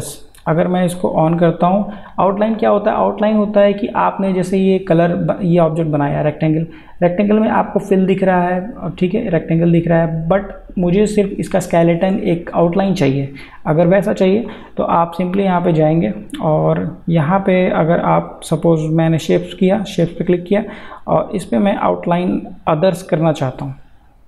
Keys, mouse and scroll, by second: 0.0-3.4 drag, 15.3 click.